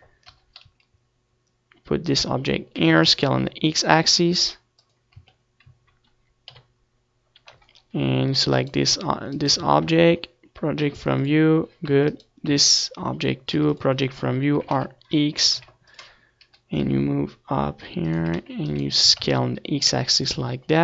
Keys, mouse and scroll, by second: 0.6-2.2 drag, 0.6 g, 3.5 click, 3.5 s, 5.9 Tab, 5.9 click, 7.2 KP_7, 10.3 Tab, 11.6 u, 12.8 Tab, 12.9-14.4 right drag, 13.3 Tab, 14.4 u, 15.4 r, 16.5-18.5 drag, 16.5 g, 19.0 click, 19.0 s, 20.0 s.